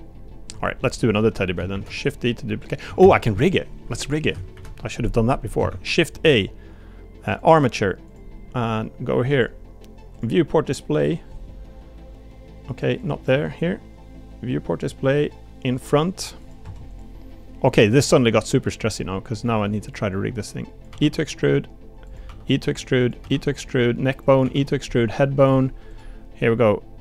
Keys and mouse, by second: 0.5 Tab, 1.2 middle drag, 1.7 shift+d, 3.0 ctrl+z, 5.7 shift+a, 9.3 click, 10.1 click, 13.0 click, 15.7 click, 16.4 click, 16.6 Tab, 18.3 click, 19.4 click, 19.9 click, 20.9 e, 22.3 e, 24.4 e.